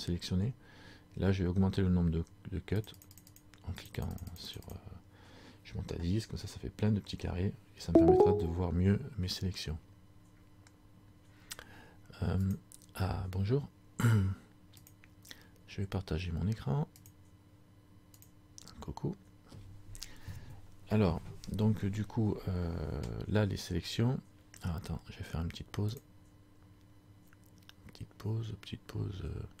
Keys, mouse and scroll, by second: 2.9-6.8 click, 6.8-8.0 scroll up 2.